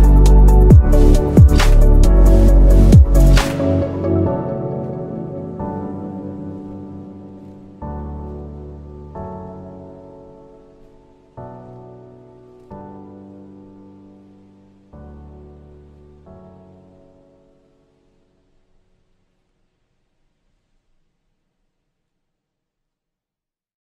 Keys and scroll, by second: 21.9 space.